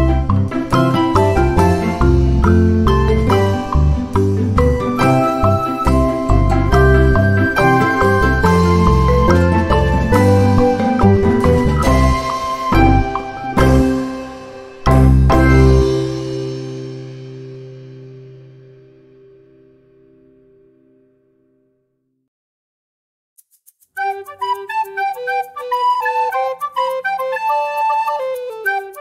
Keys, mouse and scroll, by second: 0.5 click, 1.7-3.1 drag, 3.4 shift+click, 4.2 ctrl+shift+-, 5.7 ctrl+z, 6.6 click, 7.8 click, 9.1 shift+click, 9.9 ctrl+shift+-, 11.0-11.3 ctrl+scroll up 2, 11.4 ctrl+click, 13.1 click, 13.9 Delete, 15.1-16.3 drag, 17.5 click, 18.3-18.8 ctrl+scroll down 2, 19.2 ctrl+middle click, 19.6 ctrl+middle click, 20.6 ctrl+scroll up 2, 21.0 ctrl+click, 21.6-22.8 ctrl+drag, 23.2-25.1 drag, 25.2 click, 27.4 ctrl+s, 28.0-28.4 ctrl+scroll down 2, 28.6 ctrl+middle click.